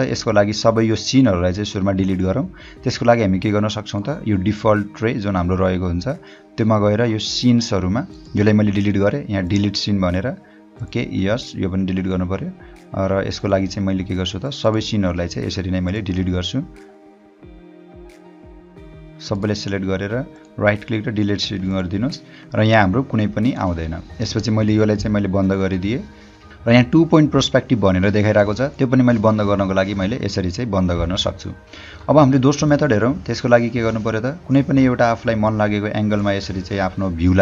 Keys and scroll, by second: 26.5 space, 34.1 h, 35.2 o.